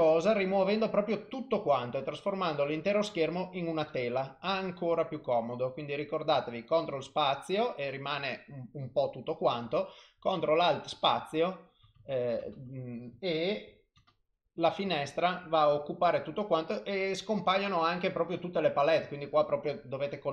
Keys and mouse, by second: 3.9 ctrl+alt+space, 3.9 click, 12.5 ctrl+alt+space.